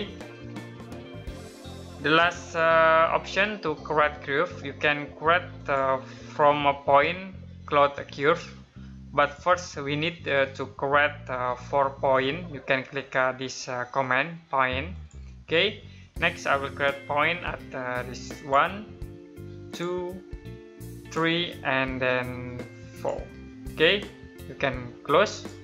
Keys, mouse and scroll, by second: 0.5 middle click, 2.1 click, 5.3 click, 8.9 click, 10.2 middle click, 14.7 click, 18.1 click.